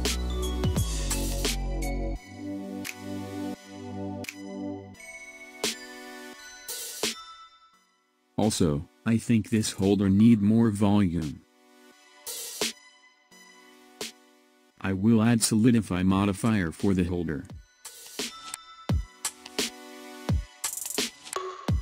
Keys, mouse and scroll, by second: 6.1 scroll up 2, 6.9-8.5 middle drag, 8.5-9.0 scroll down 1, 9.0-12.0 middle drag, 13.7 KP_1, 14.2-14.9 scroll down 7, 15.5-16.3 scroll up 4, 17.8 click.